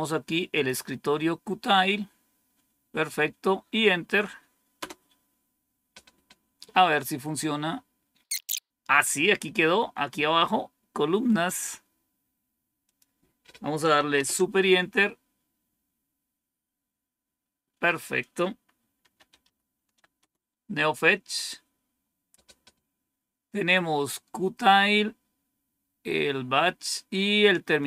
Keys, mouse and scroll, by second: 0.4 click, 4.7 Return, 8.5 click, 14.0 super+Return, 18.6-19.8 typing, 20.1 Return, 27.7-27.8 drag.